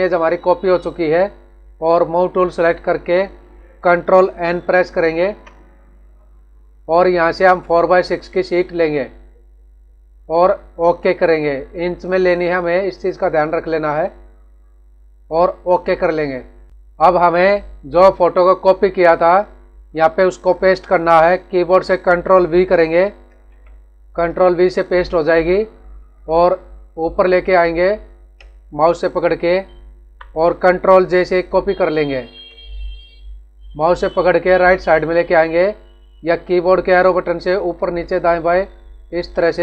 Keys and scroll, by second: 5.0 ctrl+n, 16.7 ctrl+=, 23.2 ctrl+v, 29.5 Up, 32.1 ctrl+j, 36.9 Up, 38.0 Down, 38.5 Up, 39.1 Right.